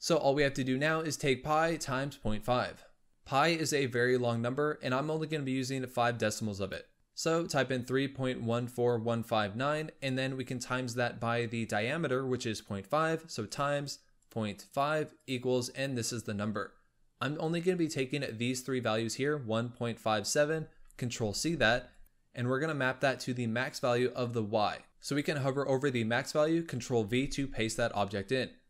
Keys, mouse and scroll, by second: 21.8 click, 24.8 click, 26.9 ctrl+v.